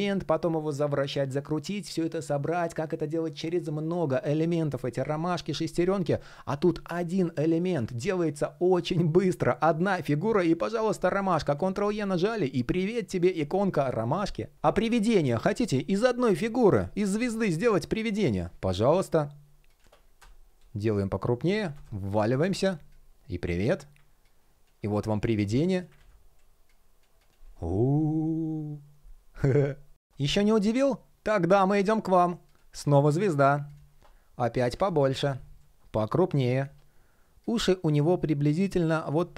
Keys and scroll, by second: 11.1 super+e, 25.6 super+y.